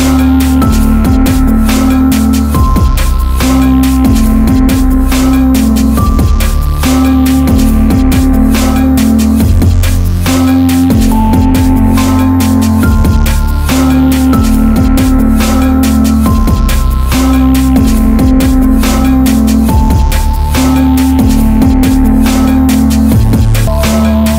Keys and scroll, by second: 1.0 Return, 4.3 ctrl+t, 7.0 Return.